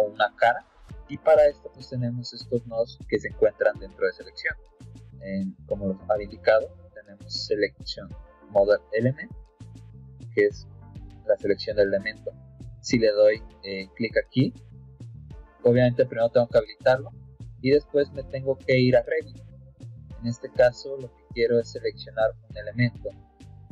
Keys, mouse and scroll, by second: 1.0 alt+Tab, 5.6 click.